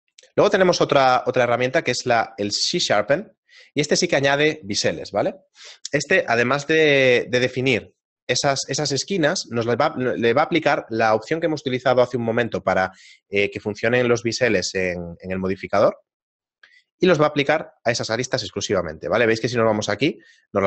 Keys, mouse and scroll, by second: 0.2 right click, 1.0 middle click, 1.6 q, 17.3-18.1 scroll up 2, 18.1 Tab, 19.1 shift+middle click, 19.8 a, 20.3 right click.